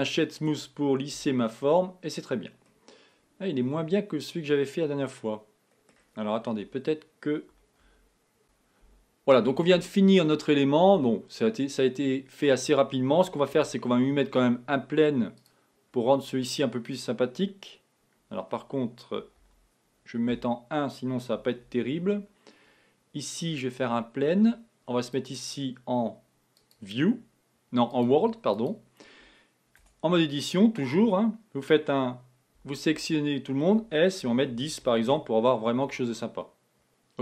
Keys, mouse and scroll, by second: 1.2 KP_1, 2.1 scroll down 2, 2.7-5.9 middle drag, 6.7 KP_1, 8.0 z, 13.6 shift+a, 19.5 z, 20.3 KP_1, 21.7 shift+a, 25.2-29.8 drag, 29.8 Tab, 32.6 a, 33.0 a, 34.1 s, 36.4-37.2 middle drag.